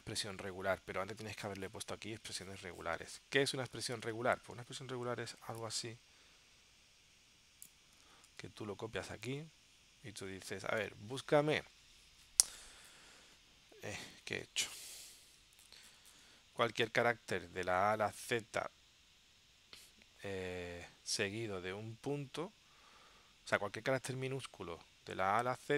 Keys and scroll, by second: 4.2 super+Tab, 8.2 super+c, 9.4 super+v, 15.0 super+v.